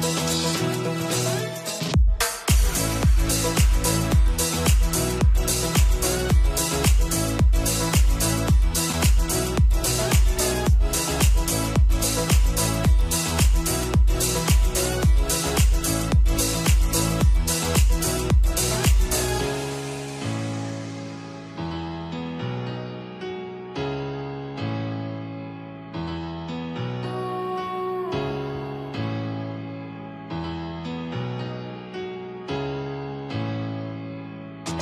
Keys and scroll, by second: 22.8 ctrl+d.